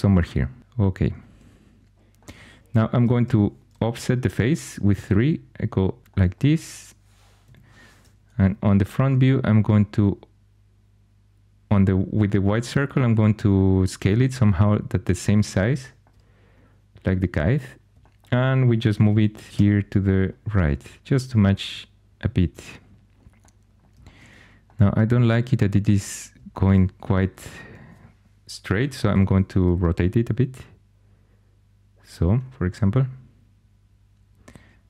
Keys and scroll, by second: 0.1 typing, 3.2 3, 7.4 1, 19.0 4, 19.5 g, 29.0 r.